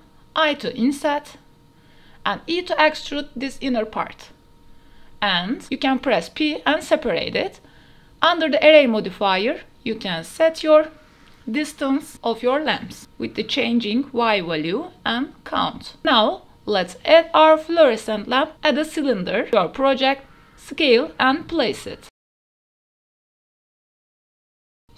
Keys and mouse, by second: 0.3 i, 2.8 click, 3.1 e, 5.2 l, 5.3 click, 6.3 p, 8.3 Tab, 8.5 click, 11.4-13.1 drag, 13.3-13.9 drag, 14.0-14.4 shift+drag, 14.6-15.7 drag, 15.9 g, 15.9 shift+Tab, 16.0 shift+a, 19.2 s, 20.6-21.5 typing, 21.1 KP_Enter, 22.9-24.9 typing, 24.7 click.